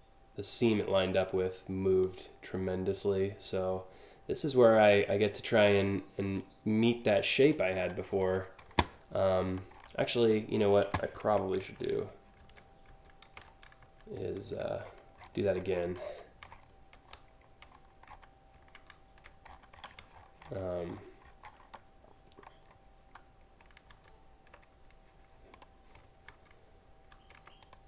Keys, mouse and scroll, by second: 1.6-7.1 drag, 9.3 click, 11.4 ctrl+z, 12.0 ctrl+z, 12.5 ctrl+z, 13.0 ctrl+alt+z, 13.4 ctrl+alt+z, 13.7 ctrl+alt+z, 14.4-15.3 scroll down 3, 15.4 scroll up 5, 15.6-16.3 scroll down 3, 16.7-17.8 scroll down 8, 18.3 ctrl+z, 19.1-20.2 scroll up 6, 20.5-21.0 scroll up 2, 21.1 scroll down 3, 21.2 scroll up 1, 23.5 ctrl+z, 25.1 click, 25.9 ctrl+z, 26.7 ctrl+z, 27.2 click, 27.7 ctrl+z.